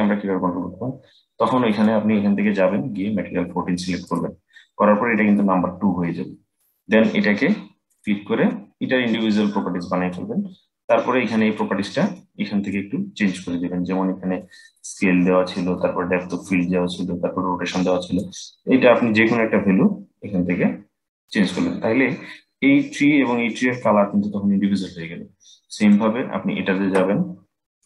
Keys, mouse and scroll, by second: 1.4 click, 7.6-10.6 drag, 10.6-13.3 middle drag, 13.3-14.1 scroll up 6, 14.1 middle click, 14.8-15.5 scroll up 4, 15.5-17.9 middle drag, 17.9-20.9 drag, 25.5 click, 27.5-27.8 drag.